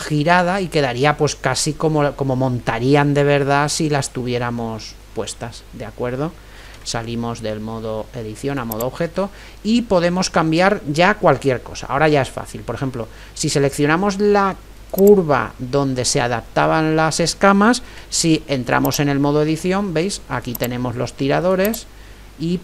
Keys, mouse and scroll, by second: 1.1-5.4 middle drag, 5.4-6.8 scroll down 1, 6.8 middle click, 7.0 Tab, 8.8 Tab, 9.5-11.3 middle drag, 15.0-16.7 right drag, 15.7-18.9 middle drag, 18.1 Tab, 20.5-22.6 right drag.